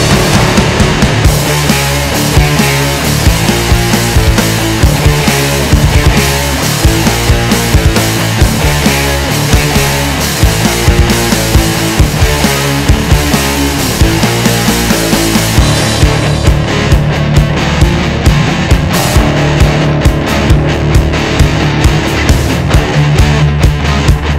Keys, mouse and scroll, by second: 0.3-1.6 drag, 1.6 middle click, 2.5 click, 3.8 ctrl+shift+click, 4.5-7.6 middle drag, 10.5-11.7 middle drag, 11.7 KP_1, 12.3 KP_3, 13.0 KP_1, 13.4 middle click, 13.9-14.2 scroll up 2, 14.6 ctrl+z, 19.2 middle click, 20.0 click, 21.0 ctrl+shift+click, 23.4 click.